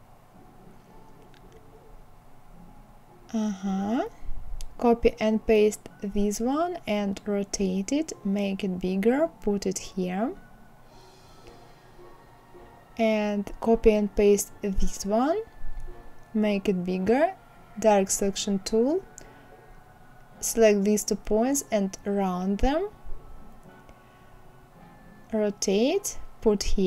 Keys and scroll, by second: 3.4 ctrl+c, 3.7 ctrl+v, 12.2 ctrl+c, 12.7 ctrl+v.